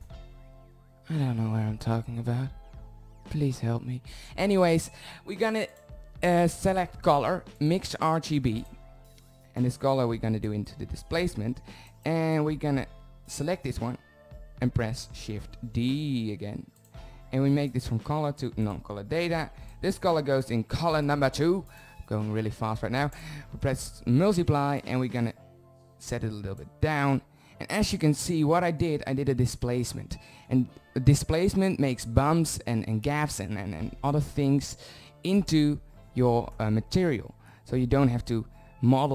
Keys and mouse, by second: 4.7-6.8 drag, 7.0 middle drag, 8.7-10.6 drag, 10.9-13.0 drag, 14.0 shift+d, 16.8-19.7 drag, 20.9 click, 22.2 click, 23.7 click, 31.3-33.4 drag.